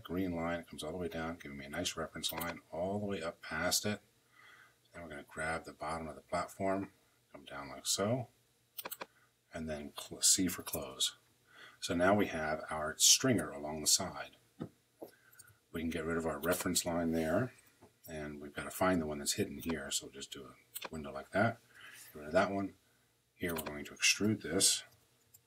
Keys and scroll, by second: 10.2 c, 10.4 Return, 15.1 Escape, 17.3 Delete, 21.5 Delete, 24.1-25.4 typing.